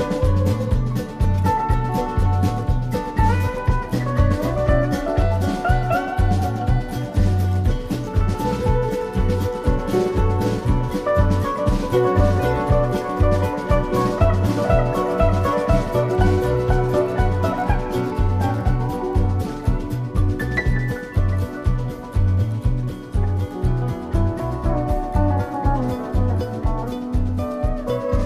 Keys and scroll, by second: 0.2 shift+Up, 2.7 shift+Down, 4.5 shift+Up, 4.9 shift+Down, 5.6 shift+Up, 6.5 shift+Down, 7.1 Up, 8.5 Down, 9.3 Up, 11.6 shift+Down, 13.1 shift+Down, 22.2 BackSpace.